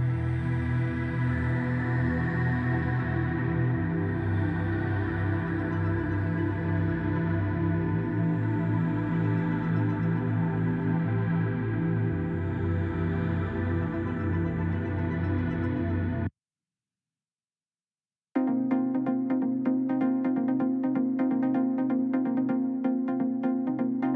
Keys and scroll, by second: 16.7 Delete.